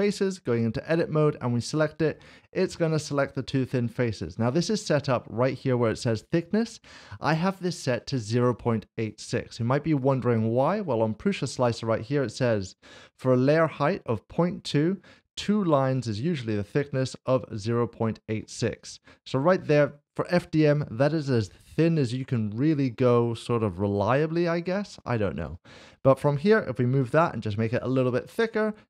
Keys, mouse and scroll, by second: 0.5 Tab, 1.6 click, 2.3 middle click, 10.0 click, 19.6 click, 21.2 click, 21.4 middle click, 23.5 Tab, 24.7 middle click, 25.4 click, 26.4 g, 27.0 x, 28.2 Tab.